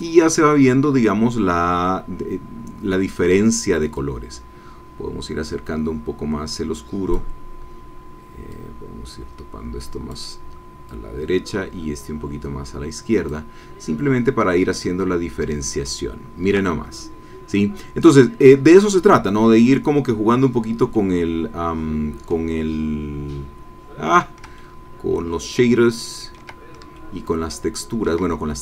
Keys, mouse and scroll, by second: 4.0-7.4 drag, 8.5-10.3 drag, 10.9-13.5 drag, 13.8 scroll down 2, 14.6 ctrl+scroll down 2, 14.7-16.7 ctrl+middle drag, 21.3 middle click, 21.5 scroll up 2, 24.5-26.5 ctrl+drag, 26.9-28.2 ctrl+drag.